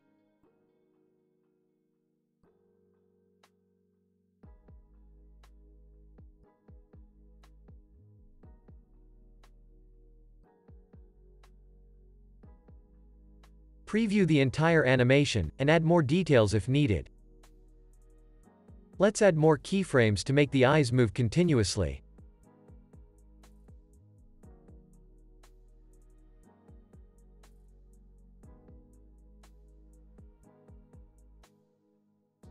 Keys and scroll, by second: 16.8 space, 17.2 super+s, 20.8 u, 21.9 super+=, 23.0 super+-, 23.5 space, 24.5 x, 31.9 z.